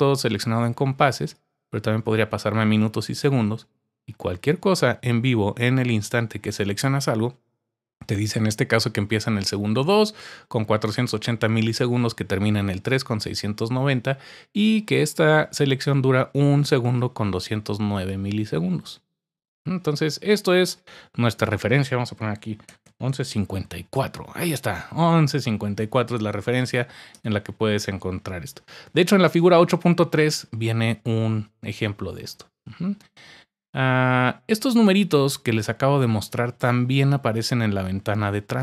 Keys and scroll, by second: 22.4-23.8 typing.